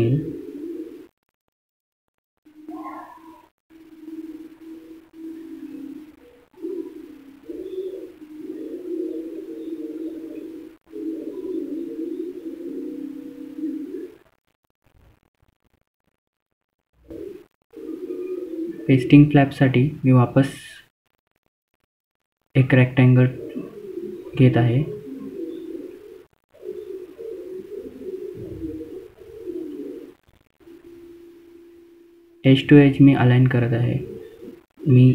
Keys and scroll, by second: 6.1 F12, 14.0 F3, 16.2 typing, 18.1 F3, 20.2 F4, 21.0 F2, 22.5 typing.